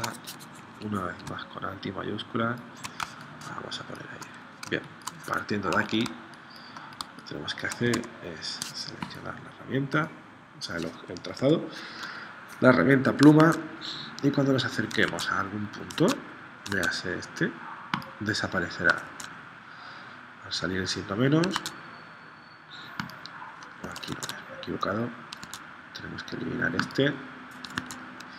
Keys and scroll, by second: 3.2 space, 4.8 space, 5.7 z, 6.0 space, 7.1 space, 8.0 v, 11.5 p, 13.4 super+Tab, 15.1 super+Tab, 16.0 super+Tab, 16.8 super+Tab, 19.1 super+Tab, 21.7 super+Tab, 23.8 super+z, 24.1 super+Tab, 25.4 super+Tab, 27.8 super+Tab.